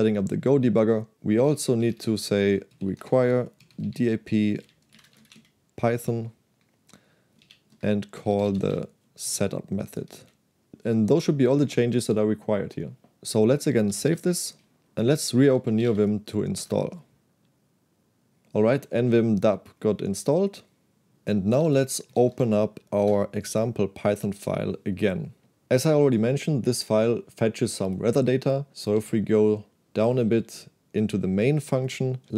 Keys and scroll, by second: 1.1-5.8 typing, 6.9-10.2 typing, 13.9 shift+z, 14.1 shift+z, 15.3-16.4 typing, 16.7 Return, 21.4-22.8 typing, 23.1 Return, 29.1 ctrl+d, 30.2-31.5 typing.